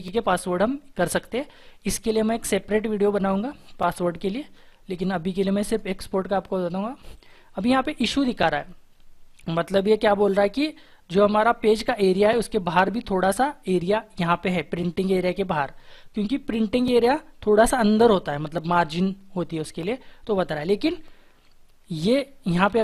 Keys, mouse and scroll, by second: 13.5-14.8 scroll up 1, 15.3 shift+F4, 22.5 ctrl+e.